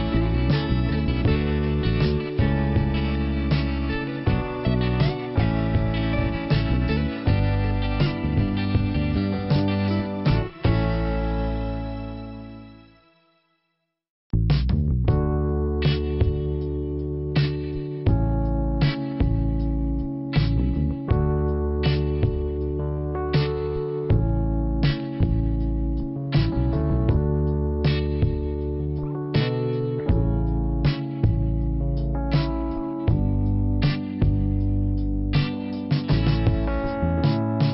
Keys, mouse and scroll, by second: 4.8 scroll down 1, 6.6 click, 6.7 click, 13.5 click, 13.7 click.